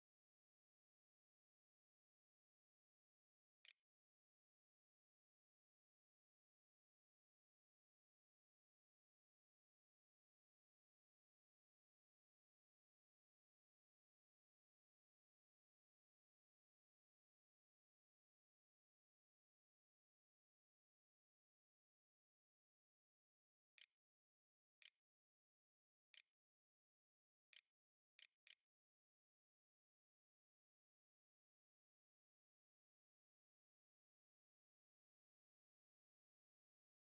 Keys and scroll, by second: 0.0-0.5 typing, 2.2-3.4 typing, 7.3 ', 7.8 ;, 8.6 o, 22.8-29.4 typing.